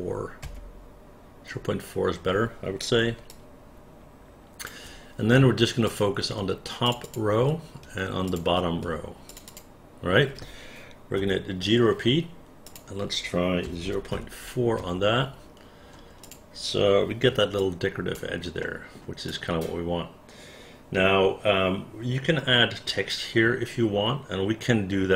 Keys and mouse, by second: 0.5 Return, 3.4-4.7 alt+drag, 5.9 click, 6.9 shift+click, 7.1 shift+click, 8.3 shift+click, 9.4 shift+click, 9.5 shift+click, 11.3 g, 12.7 click, 13.7 KP_0, 13.9 KP_Decimal, 14.2 KP_4, 14.9 Return, 16.3 click, 17.7 alt+click, 18.7 alt+middle click, 19.4-25.1 alt+drag.